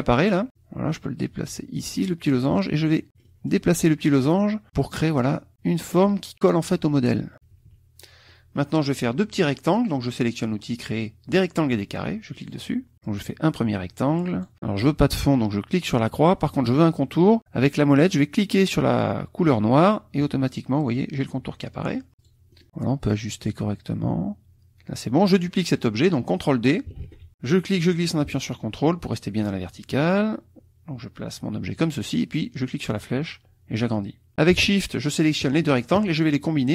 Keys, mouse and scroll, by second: 0.5-3.1 drag, 3.1 middle click, 4.2 click, 7.3 KP_Subtract, 8.3 middle click, 12.3 click, 13.1-14.5 drag, 15.8 click, 19.8 middle click, 22.2 click, 22.5-23.6 drag, 27.0 ctrl+d, 27.4-31.9 drag, 32.8-34.3 drag, 35.0 shift+click.